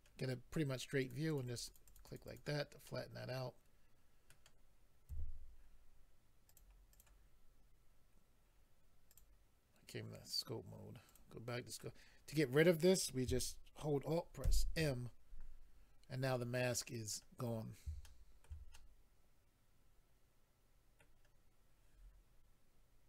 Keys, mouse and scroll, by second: 1.0 click, 1.1 click, 1.3 click, 1.4 double click, 1.5 double click, 1.6 double click, 1.6 double click, 1.8 double click, 1.9 double click, 2.0 double click, 2.0 double click, 2.2 double click, 2.3 double click, 2.8 middle click, 5.1 a, 6.5 click, 6.6 click, 6.9 click, 7.0 double click, 9.1 click, 9.2 click, 11.1 click, 11.2 click, 14.4 alt+m, 15.7-16.1 scroll down 3, 16.7 middle click, 16.7 scroll down 3, 17.4-18.0 scroll down 2, 18.0 shift+middle click, 18.7 middle click.